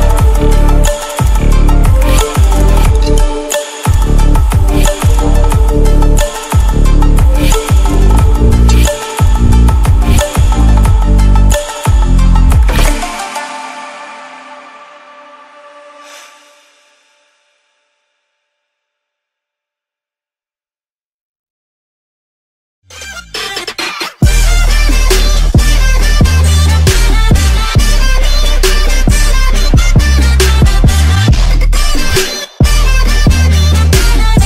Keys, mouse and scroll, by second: 2.0-5.5 drag, 5.5 Delete, 6.5-9.3 drag, 9.3 F9.